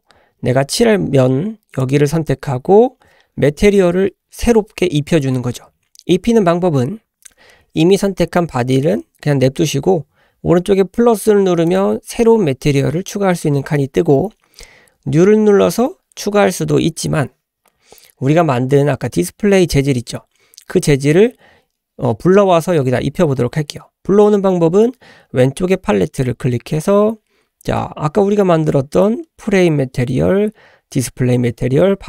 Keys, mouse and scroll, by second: 0.0-0.5 scroll up 2, 1.8 click, 11.7 click, 26.0-32.0 drag.